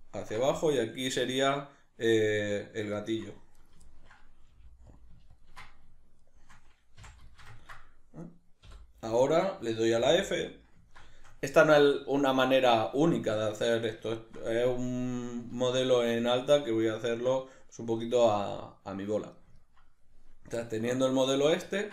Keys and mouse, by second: 2.9 shift+right click, 3.5 right click, 3.9-5.0 ctrl+middle drag, 4.5 g, 5.3 ctrl+click, 6.2 shift+right click, 7.0 f, 7.3 ctrl+shift+middle click, 8.2 right click, 8.6 l, 9.2-21.9 shift+middle drag, 10.0 f.